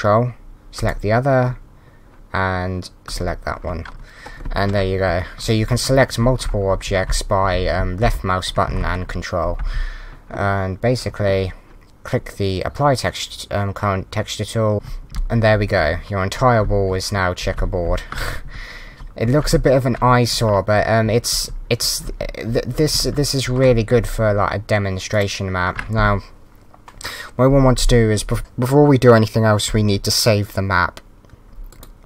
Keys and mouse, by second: 0.7 ctrl+click, 3.0 ctrl+click, 4.8-8.7 typing, 6.8 click, 8.0 click, 8.6 Right, 14.7 a, 15.1 s, 15.8 Right, 15.9 a, 16.6 Right, 16.6 s, 17.9 Left, 18.9 a, 19.3 Right, 19.5 s, 21.0 Right, 21.5 a, 21.8 Right, 22.2 a, 23.0 Right, 23.0 a, 25.1 click, 31.7 click.